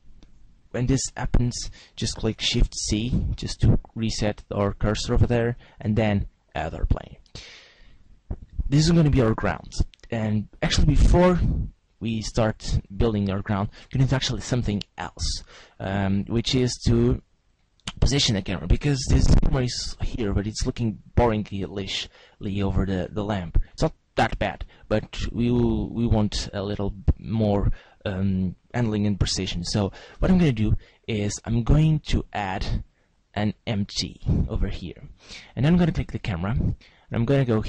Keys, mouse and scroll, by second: 2.6 shift+c, 3.9-4.7 scroll up 5, 5.8 shift+a, 11.2 s, 13.7 right click, 16.9 click, 18.3 right click, 18.9-19.9 scroll down 1, 19.9 scroll down 1, 23.7 g, 27.6 right click, 30.2 shift+a, 36.1 right click.